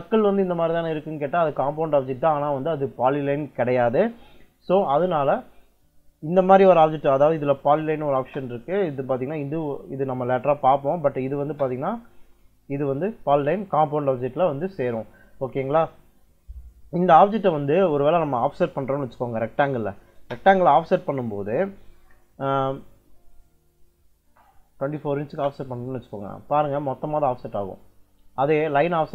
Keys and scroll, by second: 6.9 Escape, 7.6-8.4 typing, 11.3 space, 15.8 Escape, 19.8 o, 20.0 space, 24.3-25.3 typing.